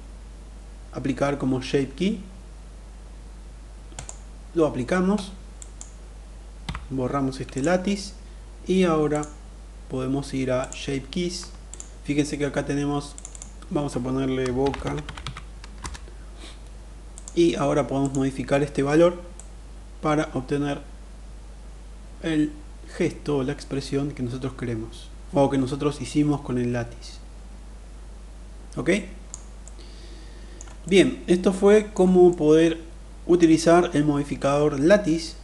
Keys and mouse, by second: 4.9 drag, 5.9 Delete, 8.4 click, 9.9 click, 11.1 click, 12.5 click, 12.7-15.9 drag, 16.7 click, 18.8-28.7 drag, 28.9-30.0 middle drag, 30.3-31.4 middle drag, 31.7-32.8 middle drag.